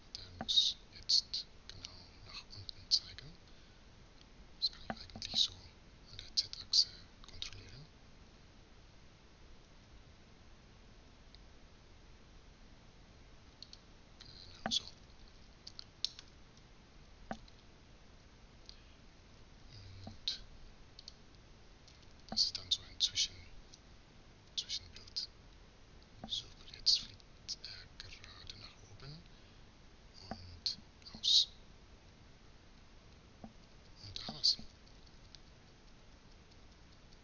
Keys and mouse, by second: 0.9 z, 8.0 r, 16.3 z, 18.7 a, 18.9 a, 19.7 i, 21.6-23.6 middle drag, 24.2 Left, 24.7 Right, 25.1 Right, 25.9 Left, 26.6 Right, 27.0 Right, 28.3 Right, 29.5-33.2 Right, 33.3-35.9 Left, 36.1-36.7 Left, 36.9 Left.